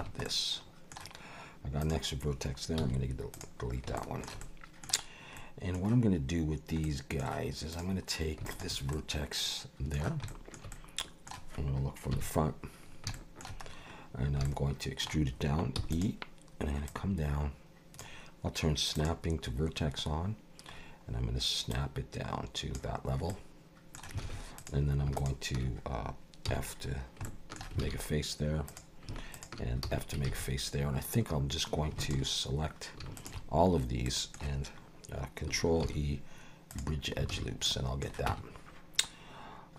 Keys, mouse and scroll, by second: 0.0 Tab, 0.2 middle click, 1.8 click, 2.8 x, 4.0 shift+middle click, 4.4 middle click, 5.3 middle click, 6.8 middle click, 7.7 click, 8.5 shift+click, 8.9 middle click, 10.3 shift+middle click, 10.7 middle click, 12.1 KP_1, 13.1 shift+middle click, 13.6-14.4 scroll up 4, 14.4 shift+middle click, 15.8 e, 16.9 click, 18.9 click, 20.7-21.7 scroll up 3, 21.7 click, 23.3 middle click, 24.2 alt+a, 24.6 click, 25.2 shift+click, 26.5 f, 26.6-27.2 scroll down 4, 27.2 shift+middle click, 27.8 alt+a, 28.7 click, 29.3 shift+click, 29.8 f, 30.3 alt+a, 32.0 alt+shift+click, 33.2 alt+shift+click, 34.0 middle click, 35.8 ctrl+e, 37.3 alt+a, 37.7 middle click, 38.3 Tab.